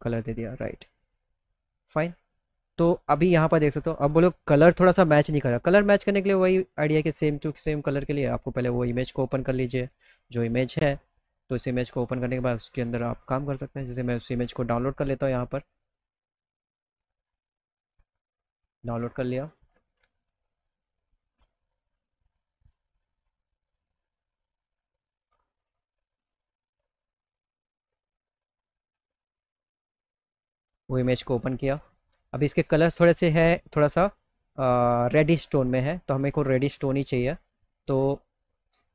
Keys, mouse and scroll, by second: 0.2 middle click, 0.5 middle click, 0.7 alt+middle click, 1.9 middle click, 2.2 middle click, 3.4 click, 5.3 click, 6.5 click, 13.1 click, 15.1 click, 17.7 click, 18.7 click, 23.5 click, 23.9 click, 27.3 click, 28.8 click, 29.0 click, 29.8 click, 29.9 click, 32.0 click, 33.7 middle click, 34.2 middle click, 34.6 middle click, 34.9 middle click, 35.2 alt+middle click, 35.9 middle click, 36.8 middle click, 37.6 click, 38.2 scroll up 1, 38.4 click.